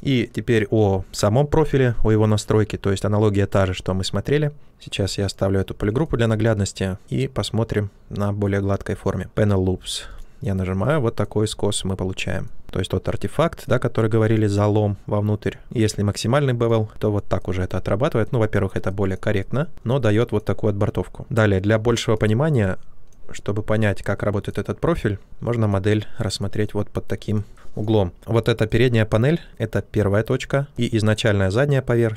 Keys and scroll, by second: 2.4 ctrl+z, 15.6 ctrl+z.